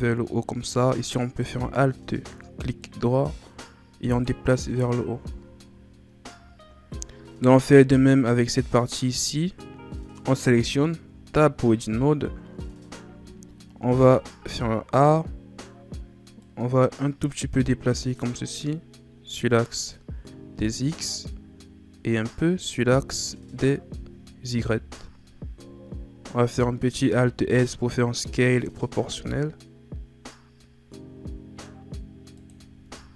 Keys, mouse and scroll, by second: 1.2 alt+right click, 2.8-4.6 drag, 4.6 Tab, 5.1 a, 5.4 scroll down 3, 6.4 scroll down 1, 6.9-8.4 scroll up 5, 8.4 right click, 11.0 Tab, 13.0 a, 13.8 a, 14.7-16.1 scroll down 2, 16.4-18.4 drag, 18.4 scroll down 3, 18.6-21.7 middle drag, 22.1-24.6 drag, 24.6 KP_1, 25.9-26.8 scroll up 2, 26.8-27.1 scroll up 1, 27.1 alt+s, 32.9 Tab.